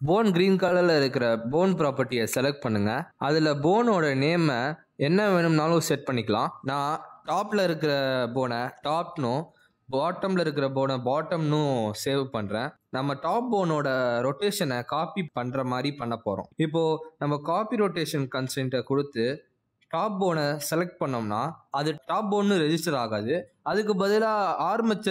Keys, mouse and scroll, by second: 3.4 click, 6.5 click, 10.4 click, 11.9 click, 13.1 t, 15.8 click, 17.1 Tab, 17.6 click, 18.6 click, 19.2 click, 21.0 click.